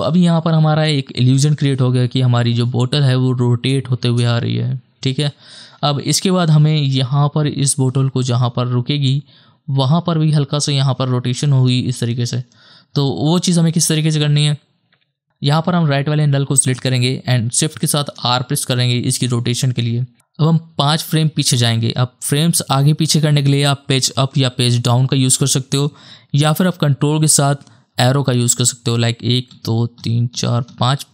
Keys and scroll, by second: 1.2 KP_0, 3.7 KP_0, 4.0 KP_0, 5.8 space, 17.9 shift+r, 24.1 Page_Up, 24.6 Page_Down, 28.0 ctrl+Left, 29.6 Left, 30.0 Left, 30.3 Left, 30.7 Left.